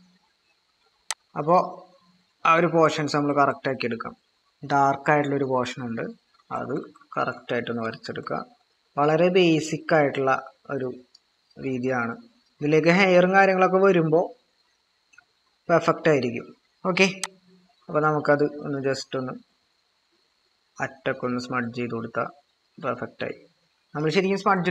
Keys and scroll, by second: 2.8-3.4 typing, 6.4-8.1 typing.